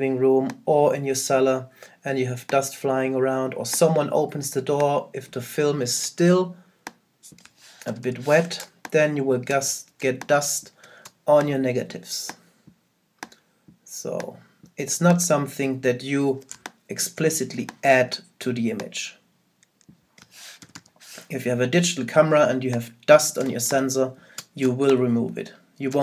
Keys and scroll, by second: 7.9 super+-, 16.5 super+space, 20.6 super+-.